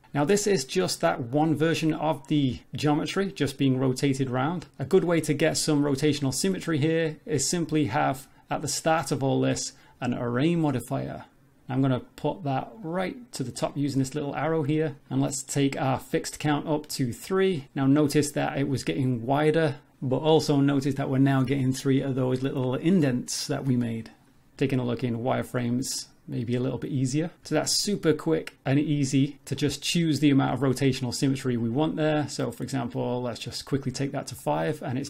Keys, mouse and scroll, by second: 2.2 scroll down 3, 2.3 Tab, 2.4 middle click, 3.9 middle click, 5.0 middle click, 6.2 shift+middle click, 7.8 click, 8.6 click, 9.5 click, 12.0 click, 12.8 click, 13.4 click, 15.0-15.7 scroll down 5, 16.9 click, 19.0 middle click, 20.2 middle click, 22.1 middle click, 22.9 middle click, 24.6 z, 25.2-25.6 scroll up 2, 25.6 middle click, 27.5 z, 28.7 middle click, 29.6 middle click, 30.2 scroll down 1, 30.3 middle click, 33.3 click, 33.6 click, 34.4 middle click.